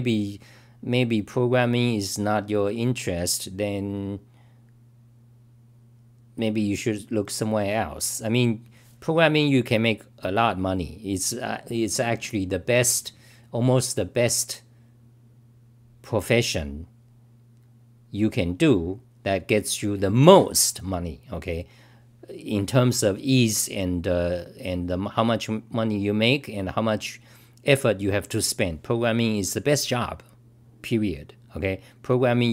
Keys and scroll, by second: 7.1 typing.